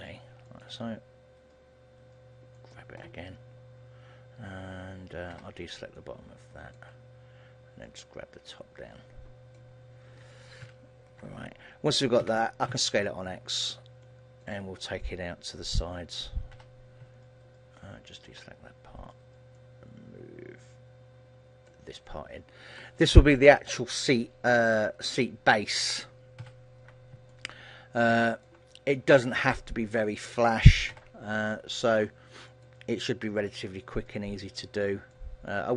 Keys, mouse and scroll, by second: 0.7 click, 1.1 g, 2.9 click, 5.4 b, 7.9 click, 10.7 ctrl+l, 12.3 s, 14.5 click, 16.7 b, 19.7 click, 22.2 middle click, 26.5 ctrl+l, 27.4 middle click, 29.5 KP_3, 31.0 b, 33.7 click, 35.2 middle click.